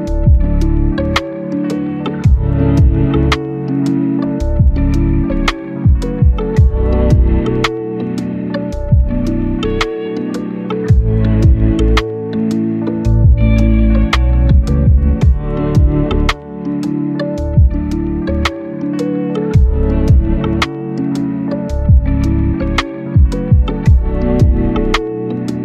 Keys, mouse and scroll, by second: 1.1 scroll down 1, 1.2 scroll up 1, 1.3 right click, 8.3 click, 14.8 scroll down 1, 14.9 scroll up 1, 15.1 right click, 16.2 scroll up 1, 16.4 right click, 16.7 scroll down 1, 16.8 scroll up 1, 17.0 right click, 17.4 scroll up 1, 17.7 click, 17.8 right click, 18.5 click, 18.7 right click, 19.2 click, 19.8 click, 20.7 click, 22.2 right click, 22.9 click, 23.1 right click, 23.4 scroll up 1, 23.6 right click, 24.1 right click.